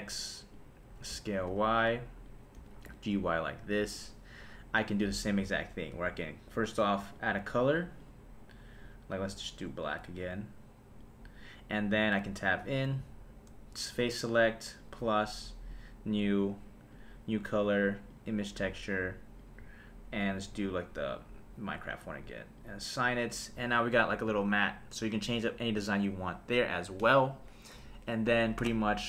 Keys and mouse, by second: 0.5 click, 1.1 s, 1.5 y, 2.2 click, 2.5 g, 2.8 y, 3.9 click, 5.3 Tab, 5.9 Tab, 7.1 click, 7.5 click, 8.0 click, 9.8 click, 10.1 click, 12.1 Tab, 14.8 click, 15.7 click, 16.9-18.2 drag, 19.4-21.2 drag, 22.6 click, 23.5 Tab, 24.0 click.